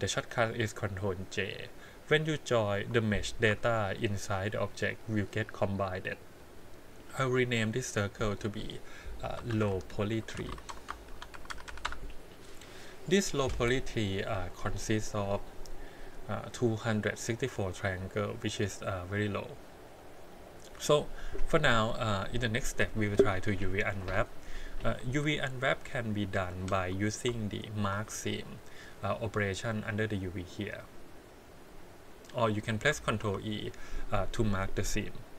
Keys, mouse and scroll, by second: 2.7 Tab, 3.5 Tab, 4.4 click, 5.1 click, 7.3 click, 7.5-9.2 drag, 11.7 e, 11.9-14.4 middle drag, 14.4 click, 15.8-18.4 middle drag, 18.4 click, 20.0-24.9 middle drag, 24.9 Tab, 25.6 click, 26.8 2, 27.7 alt+click, 28.7 click, 29.8-32.2 drag, 32.4 click, 33.0 ctrl+e.